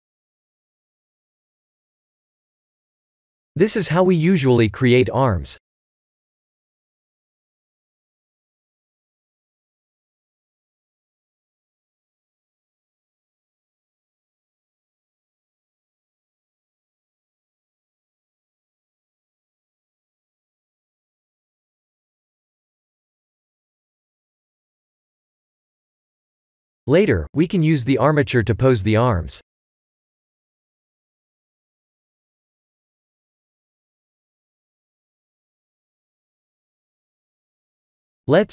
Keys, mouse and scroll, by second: 0.6 click, 1.5 Tab, 2.6 shift+z, 3.4 click, 4.3 click, 4.6 3, 5.0 click, 6.5 click, 7.5 shift+click, 7.8 middle click, 9.4 KP_1, 9.9 shift+z, 11.2 e, 25.2 middle click, 26.1 Tab, 26.7 middle click, 34.4 KP_1, 35.0 click, 36.3 shift+z, 37.7 shift+z, 38.2 click.